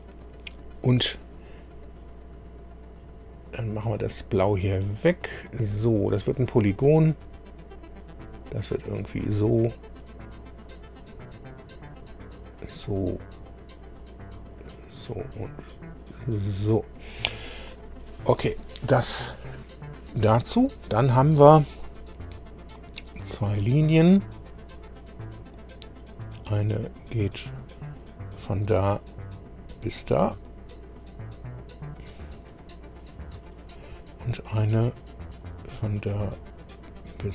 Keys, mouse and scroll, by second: 2.3-2.8 scroll up 2, 4.4 click, 6.6 click, 9.0 click, 10.6 click, 12.4 click, 14.5 click, 16.3 click, 16.9 scroll up 1, 17.7 right click, 23.5 click, 27.8-28.2 scroll up 1, 29.1 click, 32.1 click, 33.1 scroll down 1, 33.4 shift+middle click, 35.4 click.